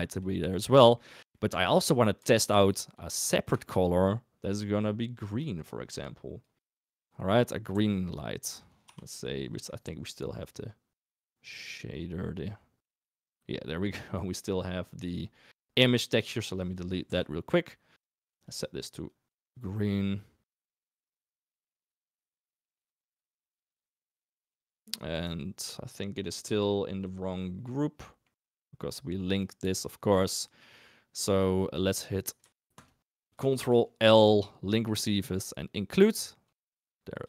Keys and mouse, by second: 0.8 shift+drag, 1.3 shift+drag, 2.5 shift+d, 4.7 click, 5.5 click, 7.6 g, 10.2 click, 11.2-12.0 drag, 16.7 click, 17.0 Delete, 20.5-21.0 middle drag, 22.2 g, 22.9 middle drag, 23.4 s, 24.3 g, 24.8 middle drag, 25.2 g, 28.0 middle click, 28.4 g, 29.6 click, 32.7 shift+click, 33.5 ctrl+l, 36.0 click, 36.6 g.